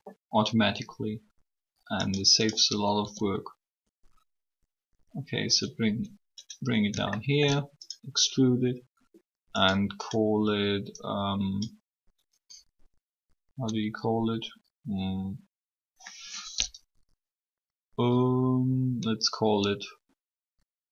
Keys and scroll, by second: 2.7 e.